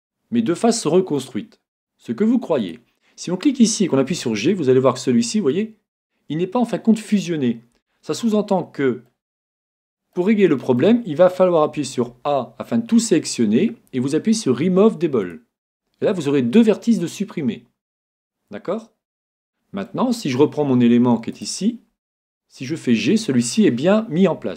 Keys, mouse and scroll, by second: 0.6 right click, 0.7-2.5 middle drag, 2.6 right click, 4.2 g, 8.3-11.8 middle drag, 11.8 a, 12.0 middle click, 12.2 a, 15.2-17.0 drag, 19.5-22.2 middle drag, 21.3 right click, 22.6 g.